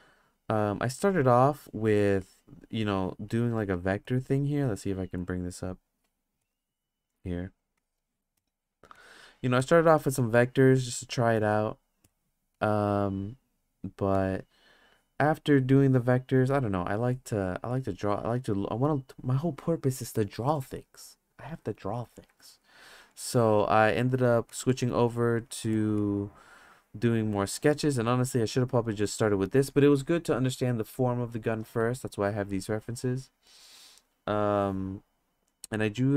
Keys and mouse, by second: 2.0 click, 2.2 click, 4.0 click, 5.2 click, 6.4 click, 7.8 click, 8.3 click, 9.0 click, 9.6-9.9 drag, 10.2 click, 10.7-11.6 drag, 12.0 click, 12.6 click, 17.7-18.8 drag, 23.2 click, 24.5 click, 24.7-25.8 drag, 26.0-26.7 drag, 27.6-28.8 drag, 32.8-35.4 drag.